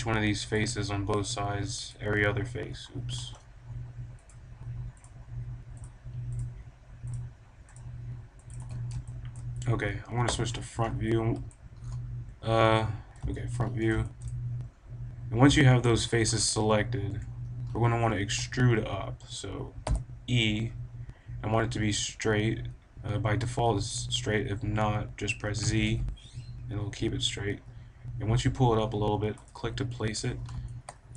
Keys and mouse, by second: 8.5 right click, 9.0 click, 10.2 KP_1, 12.2 KP_1, 12.9-15.5 middle drag, 15.6 click, 17.0 KP_1, 18.1 middle click, 19.7 e, 29.4-30.8 drag.